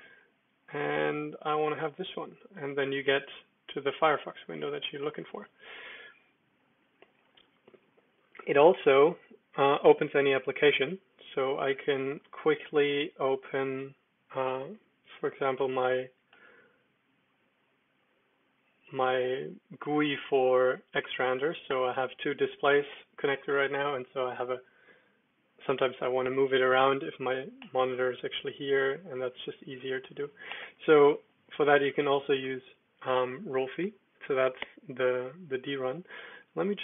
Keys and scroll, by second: 0.1 Down, 0.5 Up, 0.8 Down, 1.1 Up, 1.5 Return, 4.5 super+j, 5.1 super+h, 7.3 super+l, 8.6 super+d, 15.0-16.0 typing, 16.3 Return, 20.7 super+h, 20.7-22.0 typing, 23.5 super+l, 31.2 super+q, 31.8 super+d.